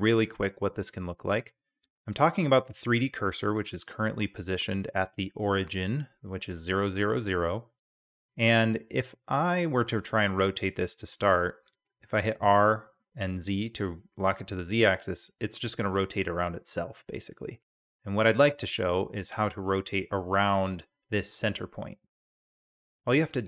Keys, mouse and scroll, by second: 12.3 r, 23.3-23.4 drag.